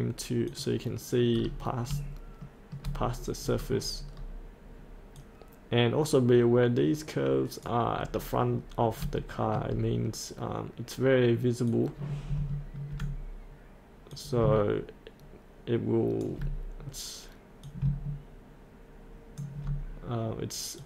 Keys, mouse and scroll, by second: 1.3 scroll down 1, 2.4 shift+middle click, 3.0-3.4 scroll down 1, 5.2-6.8 drag, 7.9 click, 8.0-8.8 scroll up 1, 9.2 shift+middle click, 9.7 scroll up 1, 11.7-13.9 drag, 15.2-17.0 ctrl+drag.